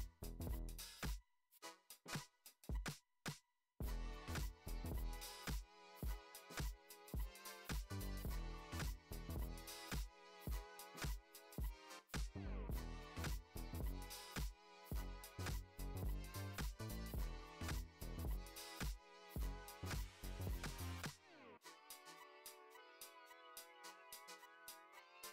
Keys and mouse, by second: 0.9 alt+shift+click, 1.3 middle click, 2.0 shift+click, 2.6 f, 3.1 p, 4.7 click, 6.2 click, 7.4 alt+shift+click, 8.0 middle click, 8.5 shift+middle drag, 9.1-9.5 shift+middle drag, 12.5 alt+e, 15.4 click, 15.8 alt+shift+click, 16.1 alt+shift+click, 16.4 middle click, 16.7 e, 17.6 shift+middle click, 18.9 click, 19.4 alt+shift+click, 20.2 alt+e, 22.5 middle click, 23.3 shift+middle click, 24.0 ctrl+r.